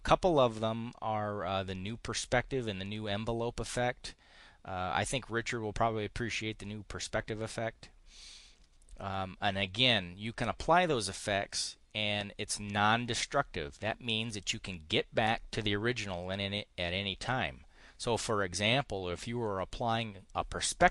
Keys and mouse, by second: 14.1 click.